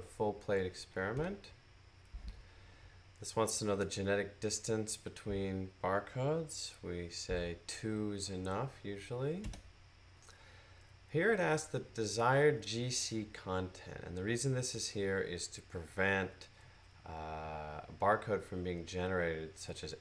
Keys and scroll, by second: 7.1 typing, 9.3 typing.